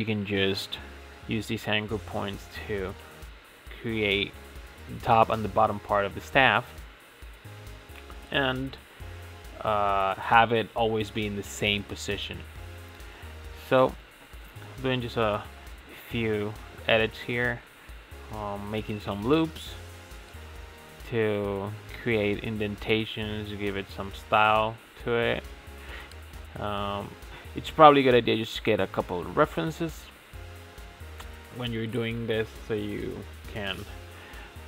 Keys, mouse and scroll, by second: 0.8 s, 3.1-4.1 middle drag, 4.1 scroll up 5, 4.3 a, 4.7 s, 6.8-7.6 middle drag, 7.6 scroll up 4, 7.9 shift+middle click, 8.9 ctrl+r, 10.0 g, 10.7 s, 12.1-15.0 middle drag, 15.0-16.0 scroll up 1, 16.0 ctrl+r, 16.9-18.4 middle drag, 18.4 ctrl+r, 20.0 g, 22.0-22.8 scroll up 5, 22.8 3, 23.4 alt+click, 24.4 e, 26.7 scroll down 3, 26.9 Tab, 27.1 click, 27.5-29.3 middle drag, 29.3 Tab, 29.7 click, 30.0 shift+middle click, 30.6 2, 31.0 click, 31.3 alt+click, 32.3 alt+shift+click, 33.0 alt+shift+click, 33.2 middle click, 33.9 alt+shift+click, 34.3 middle click.